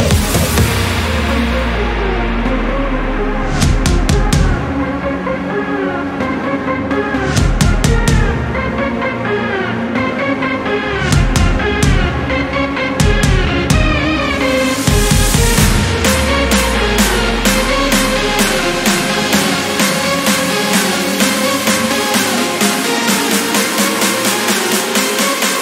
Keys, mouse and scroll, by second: 1.5 scroll up 2, 2.4 scroll down 2, 3.2 click, 4.5 click, 5.3 click, 6.5 scroll down 1, 7.7 click, 9.3 click, 10.3 click, 10.8 click, 11.2 click, 11.4 right click, 11.9 click, 13.2-15.5 drag, 16.1 click, 16.6 click, 17.0 click, 19.7 ctrl+click, 20.8 ctrl+click, 23.7 click, 24.3 click, 25.3 click.